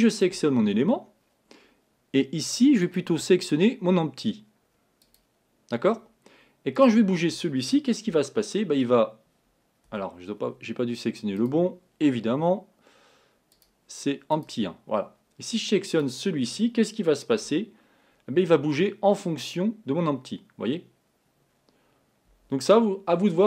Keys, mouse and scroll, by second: 0.1 click, 2.9-6.9 drag, 8.3 g, 11.4 click, 13.6-16.1 drag, 17.5 g.